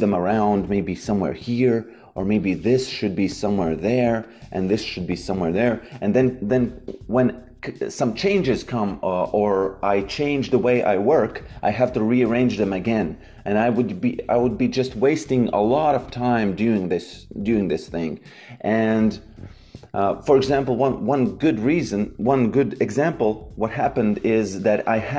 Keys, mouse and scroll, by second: 2.2 click, 4.2 click, 11.2 click, 16.0 click, 19.0 click, 19.7 Delete, 24.8 click.